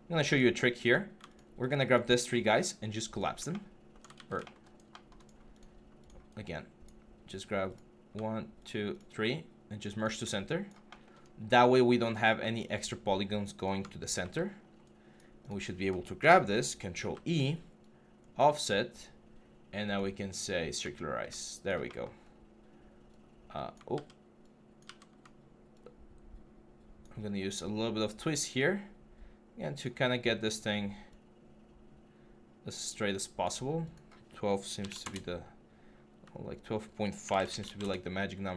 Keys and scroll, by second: 0.9 q, 3.9 ctrl+z, 14.0 g, 16.0 ctrl+F11, 16.8 ctrl+e, 23.7 ctrl+z, 34.5 typing, 34.8 Return, 37.0-37.4 typing, 37.6 Return.